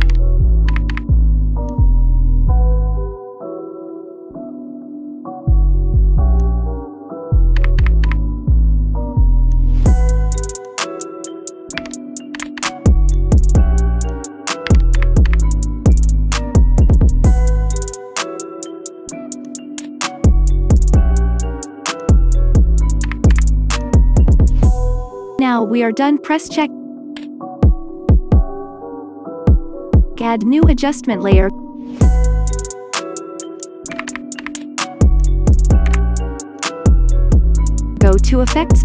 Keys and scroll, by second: 0.0 KP_1, 0.6 KP_0, 0.8 KP_0, 7.6 KP_Subtract, 7.8 KP_2, 8.0 KP_5, 11.8 KP_1, 12.3 KP_0, 12.5 KP_0, 14.6 KP_1, 14.9 KP_0, 15.2 KP_0, 23.0 KP_2, 23.2 KP_5, 34.3 ctrl+shift+d, 35.8 Delete.